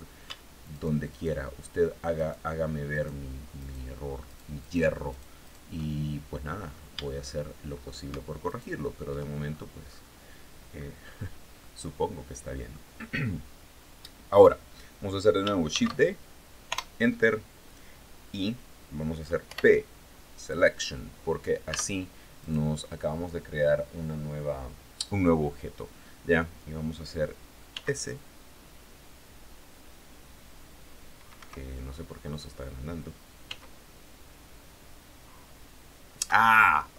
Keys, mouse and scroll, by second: 0.2 alt+shift+right click, 1.6 alt+shift+right click, 2.4 alt+shift+right click, 3.0 alt+shift+right click, 3.7 alt+shift+right click, 4.1 alt+shift+right click, 4.5 alt+shift+right click, 6.0-6.4 scroll up 1, 6.5 shift+click, 7.9 alt+shift+right click, 8.8-9.6 scroll down 4, 10.2 scroll up 2, 11.1-12.4 drag, 15.2 shift+d, 16.2 Return, 18.9 p, 19.9 click, 21.2 Tab, 21.8 right click, 27.2 s, 30.8 Escape, 32.9 s, 35.7 Escape, 36.8-36.9 scroll up 2.